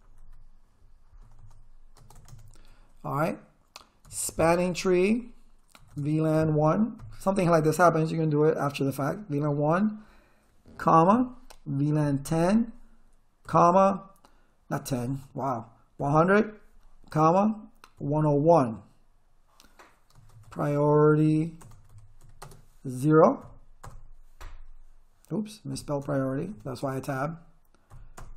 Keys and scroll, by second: 0.0-2.1 typing, 2.3 Return, 3.8-7.0 typing, 11.1 ,, 12.0 1, 12.3 0, 13.5 ,, 15.0 BackSpace, 16.0 0, 17.1-18.9 typing, 20.1-23.4 typing, 23.8 Return, 25.7 Up, 26.0 BackSpace, 26.8 Tab, 27.9 0, 28.1 Return.